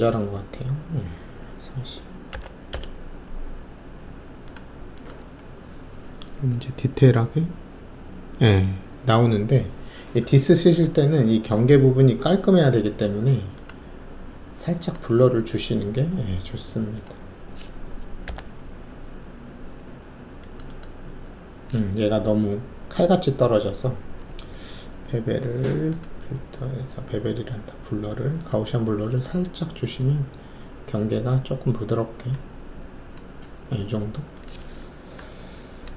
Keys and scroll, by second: 1.8-2.3 typing, 2.7 Return, 18.2 ctrl+o, 35.6 ctrl+alt+s.